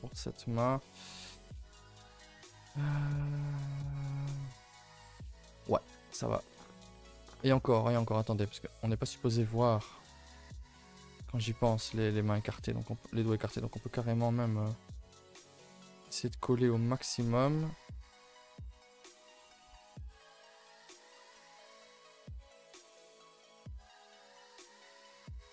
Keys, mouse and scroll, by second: 0.5 middle click, 1.0 scroll down 3, 1.2 middle click, 2.1 scroll down 1, 2.3 middle click, 2.6 Tab, 3.6 click, 3.8 a, 4.0 a, 4.0 scroll down 4, 4.2-4.5 middle drag, 4.5 ctrl+s, 4.7-5.6 middle drag, 5.6 a, 5.7 a, 6.0 ctrl+s, 6.5-6.9 scroll up 5, 7.4-8.2 scroll up 2, 8.2 click, 8.4 Tab, 8.6-9.2 scroll up 3, 8.9 a, 9.2-10.4 middle drag, 10.4 click, 10.7-11.9 middle drag, 11.9 click, 12.1 middle click, 13.1 s, 15.4 click, 16.6 g, 17.5-17.9 middle drag, 17.9 click, 18.2-18.5 middle drag, 18.5 s, 19.5 g, 20.4 middle click, 20.9 click, 21.3 middle click, 21.5 s, 23.7 click, 24.0 s, 24.9 click, 25.2 s.